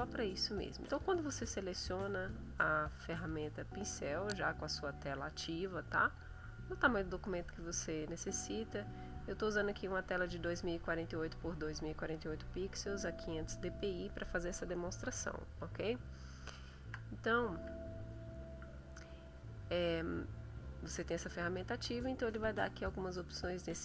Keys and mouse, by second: 0.5-1.1 drag, 6.3 click, 16.0 shift+click, 21.2 click, 22.5 click.